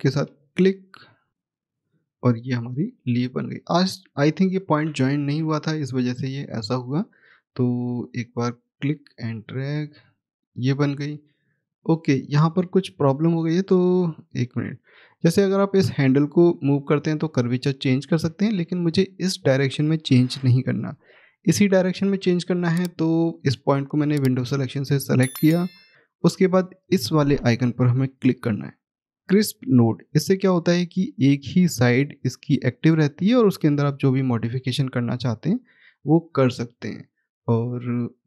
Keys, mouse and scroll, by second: 3.7-4.7 scroll up 1, 5.0 ctrl+z, 6.5 click, 9.7-10.4 scroll down 1, 11.7 click, 12.5 middle click, 13.3 click, 23.5 click, 30.2 click, 36.9 middle click.